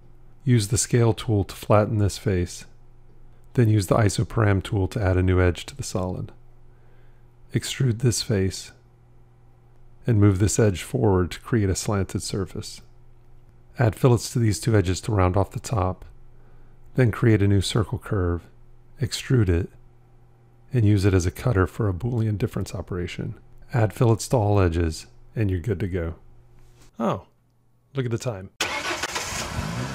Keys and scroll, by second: 4.6 ctrl+r, 18.6 v, 22.4 q.